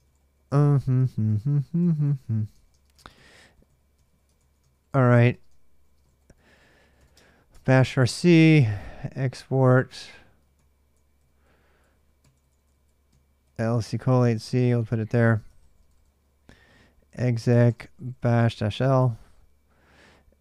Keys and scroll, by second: 0.0-13.7 typing, 1.1 ctrl+[, 14.9-20.4 typing.